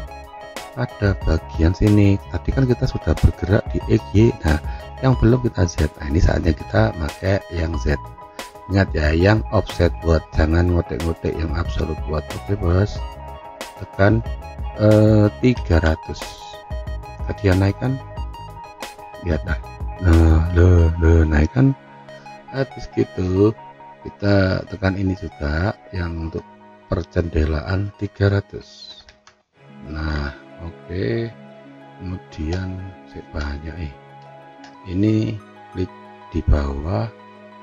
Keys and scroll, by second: 15.8 0, 16.5 Return, 20.8 F3, 28.3-29.3 typing, 30.0 Return.